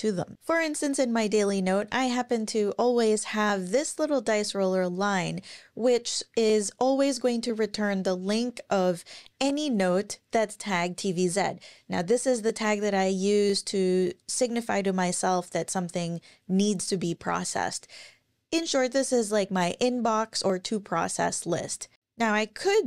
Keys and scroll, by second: 0.3 scroll down 1, 1.0 scroll down 1, 1.9-3.2 scroll up 1, 21.2-22.0 scroll down 1, 22.5 ctrl+super+r.